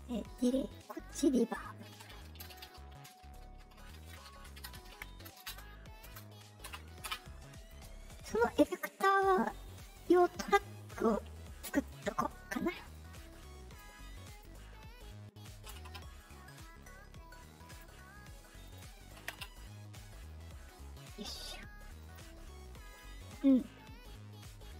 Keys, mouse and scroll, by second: 0.7 middle click, 4.5-6.0 typing, 6.6 Return, 8.5 middle click, 11.7 click, 12.9 click, 14.2 click, 16.7 middle click, 17.7 click, 18.6 click, 21.9 click.